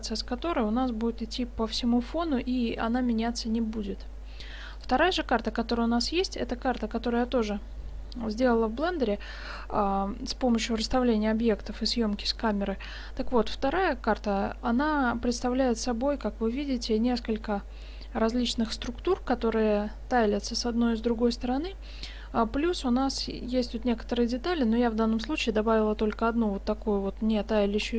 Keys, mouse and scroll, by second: 4.8-6.6 drag, 7.0-9.0 middle drag, 23.1-25.5 middle drag, 26.9-27.9 middle drag.